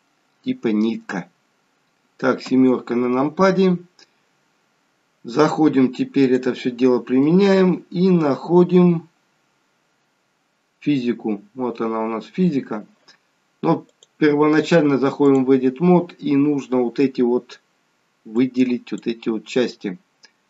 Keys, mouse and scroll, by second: 0.2-1.1 scroll down 11, 2.3-2.7 scroll down 3, 2.7 KP_7, 6.1 click, 8.1 scroll up 5, 9.3 scroll down 3, 11.3-13.1 scroll down 1, 13.9 click, 16.3-16.7 scroll down 1, 18.3 click.